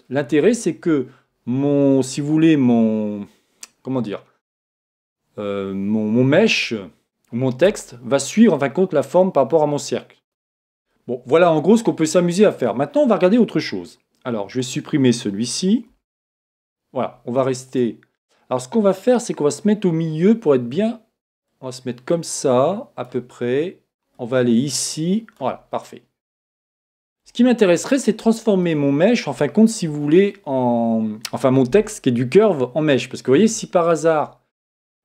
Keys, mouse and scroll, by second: 15.9 x, 17.7-21.5 right drag, 21.5-31.0 drag, 25.7-35.0 middle drag.